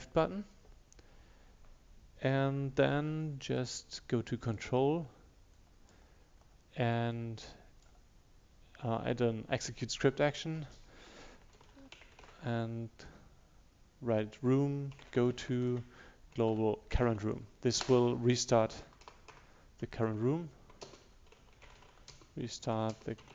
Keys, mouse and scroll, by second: 11.4-12.5 typing, 15.0-15.4 typing, 16.6 shift+9, 17.9 Return, 18.9 Return, 20.7-23.3 typing.